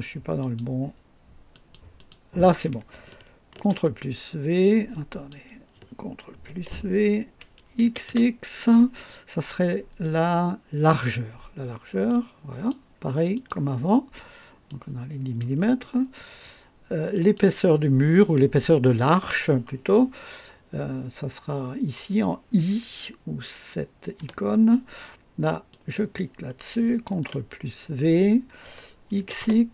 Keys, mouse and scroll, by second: 0.4 click, 1.5 click, 2.1 click, 3.5 ctrl+v, 4.6 click, 6.5 ctrl+v, 7.8 x, 10.8 click, 12.1 click, 13.3 click, 14.6-15.6 drag, 17.1 click, 24.1 i, 25.7 click, 27.1 ctrl+v, 29.2 x.